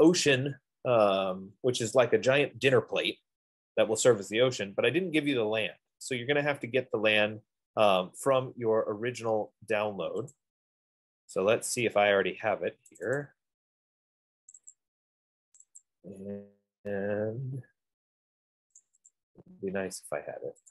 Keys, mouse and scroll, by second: 0.4 click, 10.6-12.4 drag, 13.3 click, 13.5 click, 14.8 click, 15.0 click, 15.8 click, 16.0 click, 19.0 click, 19.4 click.